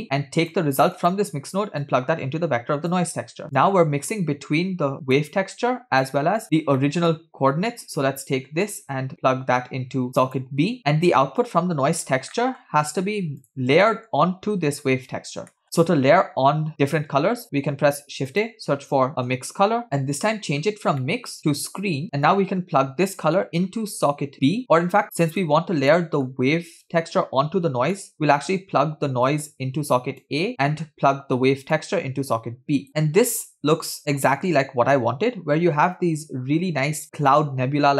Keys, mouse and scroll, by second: 0.3 click, 1.0 click, 1.9-3.1 drag, 3.7-5.4 drag, 5.7 click, 6.6 scroll down 1, 6.9 middle click, 8.7-10.6 drag, 10.8-11.2 drag, 10.8 middle click, 10.8 scroll up 2, 11.5 click, 12.4 middle click, 12.8-13.4 scroll down 1, 13.4 scroll down 1, 13.4 click, 13.9 middle click, 14.1 scroll up 2, 14.8 drag, 15.6 middle click, 18.0 shift+a, 20.8 scroll up 1, 21.1 middle click, 21.4 click, 21.8 click, 22.4 click, 22.7-23.9 drag, 25.0 middle click, 25.4 click, 27.0 middle click, 28.1 middle click, 29.3 click, 30.4 click, 30.5 middle click, 30.5 scroll down 2, 31.9-32.9 drag, 35.0-35.8 scroll up 2, 36.3-37.3 scroll down 1, 37.4-37.9 middle drag.